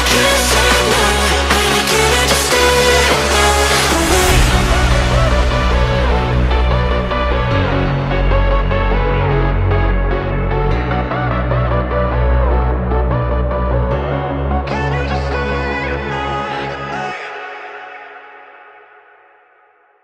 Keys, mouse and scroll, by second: 1.1 shift+middle click, 1.5 e, 3.2 s, 5.2 f, 8.2 ctrl+b, 12.5 shift+middle click, 13.2 alt+click, 13.5 middle click, 14.4 f, 15.3 ctrl+b.